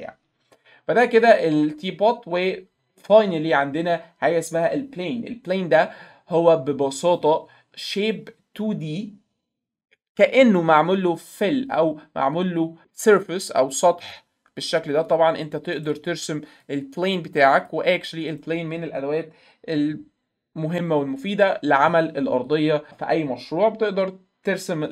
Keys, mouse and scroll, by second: 1.2 click, 7.1 click, 12.3 click, 13.2 click, 13.5 click, 13.7 click, 14.0 click, 14.2 click, 14.3 click, 14.9 click, 15.1 click, 15.2 click, 15.9 click, 16.7-17.7 drag, 18.3 right click, 22.5 click.